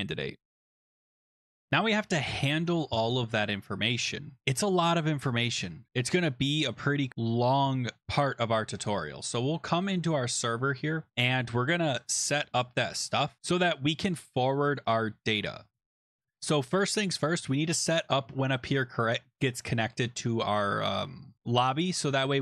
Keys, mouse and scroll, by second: 0.9 click, 1.3 click, 5.9 click, 6.4-7.1 scroll, 9.9 click, 14.2 click, 14.8 click.